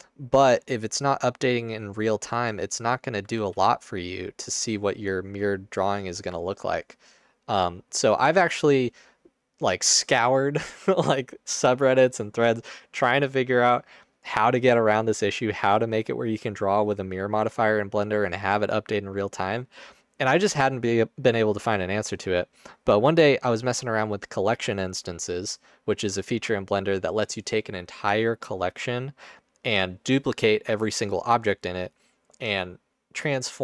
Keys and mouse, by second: 3.4 ctrl+z.